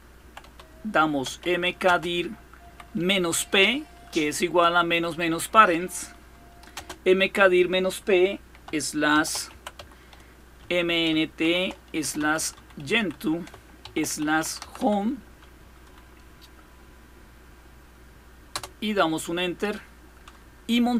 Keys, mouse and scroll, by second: 0.0-3.1 typing, 6.5 space, 8.6-15.1 typing, 18.3 Return.